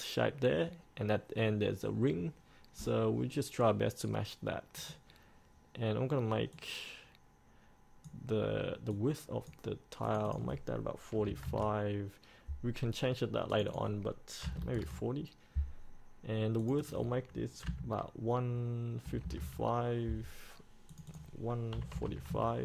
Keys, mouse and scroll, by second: 4.9-11.3 drag, 11.3 KP_4, 13.7 click, 14.6 KP_4, 16.8 click, 17.8 KP_1, 21.1 click, 22.1 KP_4.